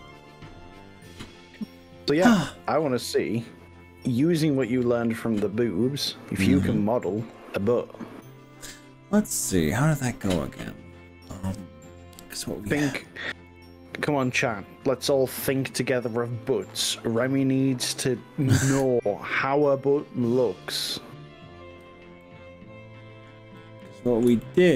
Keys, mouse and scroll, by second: 6.5 scroll down 2, 8.1-10.1 middle drag, 18.9 z, 22.2-23.3 middle drag, 23.7 middle click, 24.4 shift+middle click.